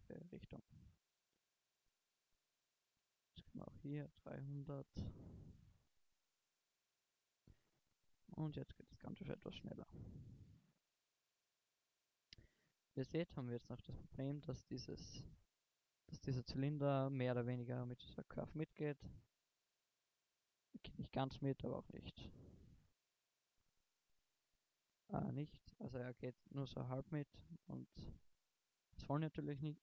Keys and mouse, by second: 0.0 shift+space, 1.4 shift+Left, 5.0 0, 5.9 shift+Left, 6.9 alt+a, 11.0 alt+a, 15.4-16.6 drag, 16.6-17.3 middle drag, 18.8-19.7 middle drag, 25.7 KP_0, 27.6 shift+Left.